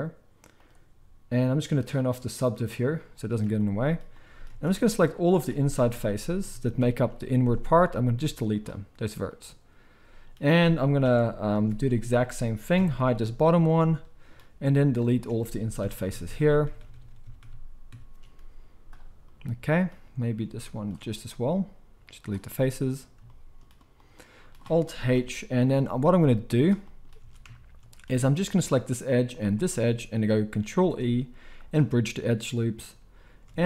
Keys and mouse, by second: 2.3 click, 4.6 alt+a, 4.9 alt+shift+click, 5.7 ctrl+KP_Add, 7.9 x, 11.0 alt+h, 11.5 alt+a, 12.7 ctrl+l, 13.1-20.7 middle drag, 13.1 h, 15.8 ctrl+KP_Add, 18.5 x, 20.7 alt+shift+click, 20.8-26.5 alt+shift+middle drag, 21.2 x, 25.1 alt+h, 26.5-28.7 drag, 27.2 alt+a, 28.7-32.7 alt+shift+middle drag, 30.6 ctrl+e, 33.5 alt+a.